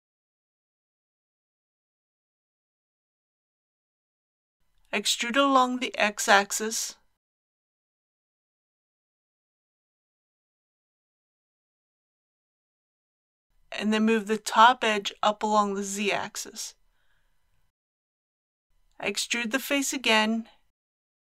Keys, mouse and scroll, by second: 1.0 scroll down 1, 1.8-5.1 middle drag, 5.0 e, 5.3 x, 8.3 shift+click, 9.2 shift+2, 10.2-11.4 scroll up 1, 11.7-13.1 middle drag, 13.6 click, 14.9 g, 15.5 z, 17.6 click, 18.1 click, 19.0 click, 19.6-19.9 scroll down 1, 20.5 middle click.